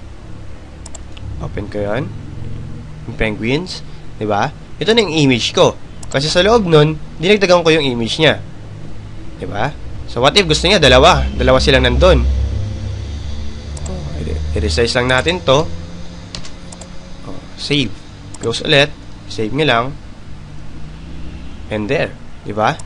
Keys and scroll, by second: 20.9 Return.